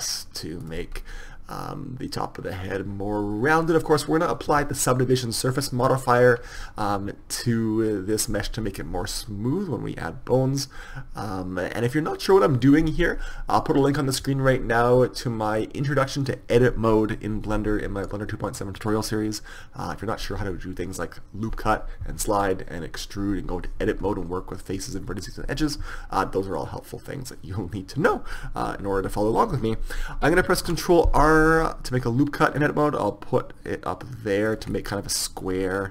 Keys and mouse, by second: 1.0 click, 2.9 middle click, 26.5-28.5 middle drag, 30.7 ctrl+r, 35.0-35.9 middle drag.